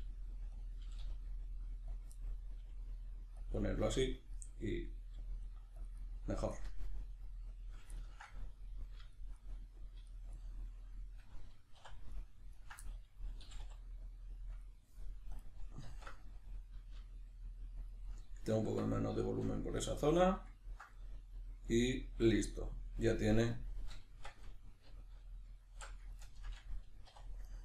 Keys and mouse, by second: 0.6 click, 0.8 g, 2.0 click, 2.1 middle click, 2.6 g, 3.4 click, 3.5-5.1 middle drag, 5.1 g, 5.9 click, 6.0-12.1 middle drag, 11.8 3, 12.1 right click, 12.5 ctrl+right click, 12.9-14.6 middle drag, 13.4 g, 14.6 click, 15.9 alt+q, 16.9 g, 17.9 click, 18.1-27.5 middle drag, 18.7 Tab, 24.1 Tab, 24.9 alt+q, 27.1 2, 27.5 right click.